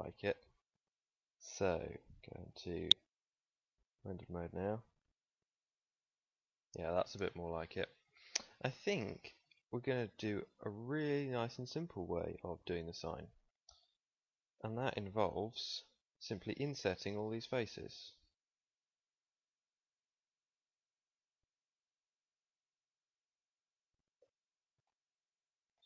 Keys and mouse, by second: 2.8-3.9 drag, 12.5 z, 14.1 middle click, 14.7-15.7 middle drag, 15.9-17.1 middle drag, 17.1 i, 24.1 middle click, 24.1 z, 24.9 middle click.